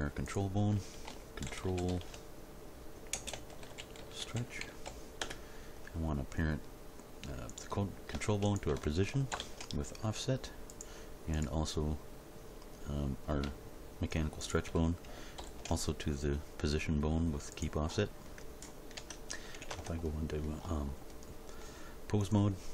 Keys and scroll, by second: 1.0 shift+c, 1.4 shift+t, 1.6 shift+r, 1.9 shift+l, 3.1-4.8 typing, 5.2 Return, 9.3 ctrl+p, 15.4 ctrl+p, 19.0 Tab, 19.7 ctrl+Tab.